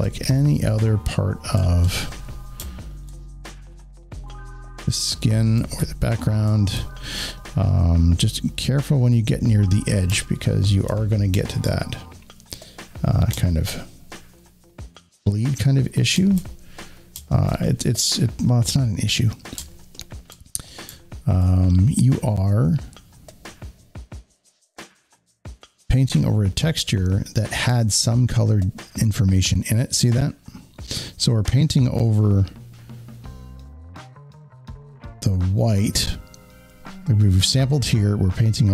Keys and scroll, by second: 10.0 alt+space.